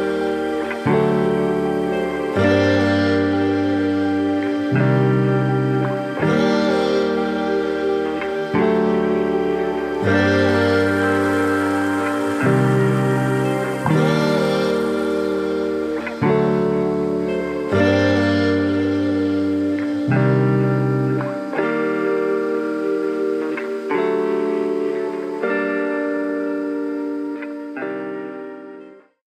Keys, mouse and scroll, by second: 0.2 shift+click, 0.7 shift+click, 0.9 middle click, 2.0 click, 2.7 g, 3.5 s, 7.0 middle click, 10.0 click, 10.3 middle click, 11.6 click, 11.8 click, 12.2 shift+click, 12.4 shift+click, 13.0 click, 14.0 r, 16.6 middle click, 17.4 click, 17.7 shift+middle click, 18.2 shift+click, 18.8 click, 19.8 r, 22.0 r, 23.4 middle click, 24.6 middle click, 25.9 click, 27.4 shift+middle click, 27.7 middle click, 28.3 shift+click, 28.5 middle click.